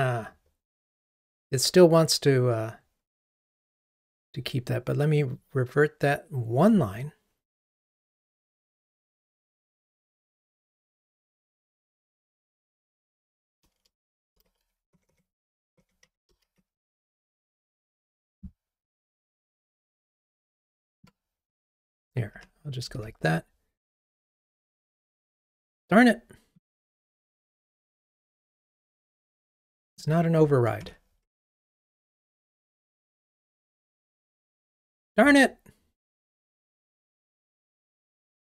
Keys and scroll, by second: 23.0 ctrl+r, 30.4 Delete, 32.1 ctrl+r.